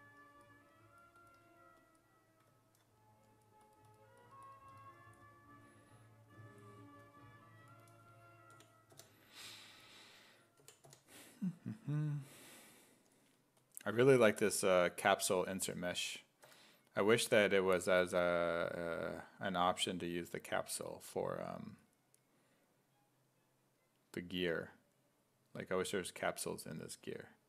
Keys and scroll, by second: 8.5 b, 10.6 b, 10.9 i, 14.8 s, 16.5 w.